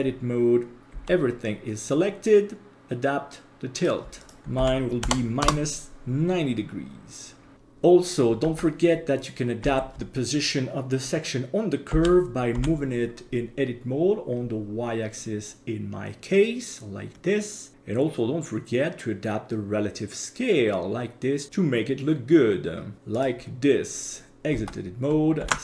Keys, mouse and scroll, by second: 0.9 a, 2.7-3.8 drag, 4.2-5.4 drag, 7.5 right click, 8.4 Tab, 9.6 a, 11.9 g, 17.7 s, 24.5 Tab, 25.4 ctrl+s.